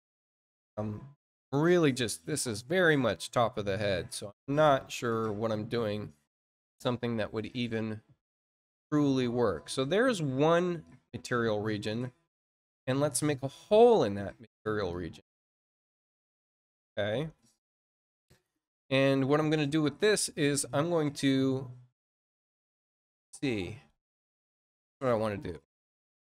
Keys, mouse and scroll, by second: 13.3 click, 14.8-16.1 drag, 20.1 click, 24.8 click, 25.8 click.